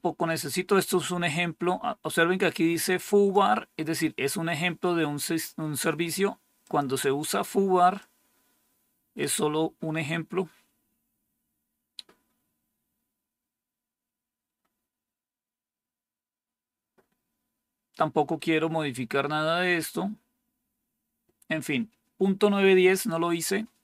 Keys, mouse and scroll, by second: 2.3 click, 6.5 click, 7.9-9.1 drag, 10.3 scroll down 2, 11.1-11.9 scroll down 2, 11.9-13.5 scroll down 1, 13.8-14.6 scroll down 1, 14.6-18.2 scroll down 1, 18.2-19.2 scroll down 1, 19.2-20.3 scroll down 2, 20.3-23.8 scroll down 1.